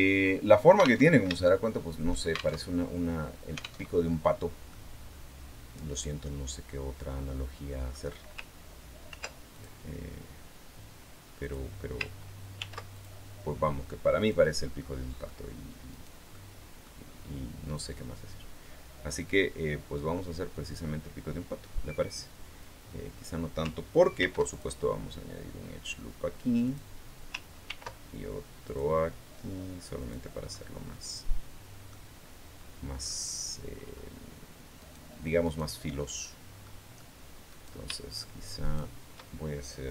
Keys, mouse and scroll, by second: 0.8 alt+Tab, 1.2 shift+click, 2.3 alt+shift+Tab, 3.6 alt+Tab, 4.5-7.8 drag, 8.8 ctrl+r, 9.3 ctrl+click, 11.2 click, 12.4 ctrl+r, 12.7 ctrl+click, 14.0 click, 14.6 middle click, 15.7 right click, 16.1 middle click, 17.6-20.7 drag, 22.4 click, 24.0 ctrl+r, 24.3 ctrl+click, 26.4 click, 27.5 ctrl+r, 28.4 click, 29.8 click, 30.2-31.8 middle drag, 32.0 scroll down 2, 32.8-33.3 scroll up 2, 34.6 right click, 35.2 right click, 35.8-36.4 scroll up 2, 36.4 middle click, 37.3 right click, 37.9 shift+right click, 38.4 shift+right click, 39.8 KP_3.